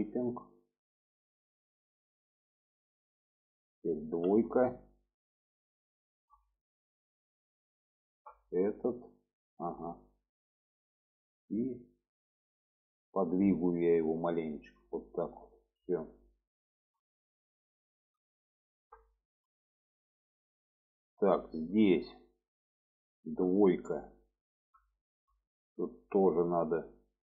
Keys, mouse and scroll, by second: 0.7 click, 1.5 middle click, 2.8 middle click, 4.2 2, 5.7 alt+shift+click, 6.8 middle click, 7.8 alt+shift+click, 8.5-10.4 middle drag, 10.8 middle click, 12.8 click, 13.2 middle click, 14.2 click, 15.4 click, 15.9 middle click, 16.7 shift+middle click, 17.2 middle click, 18.3 alt+middle click, 19.2 shift+middle click, 20.3 shift+middle click, 21.4 shift+middle click, 23.4 2, 24.1-24.7 middle drag, 25.1 middle click, 26.3 click, 26.8-27.3 middle drag.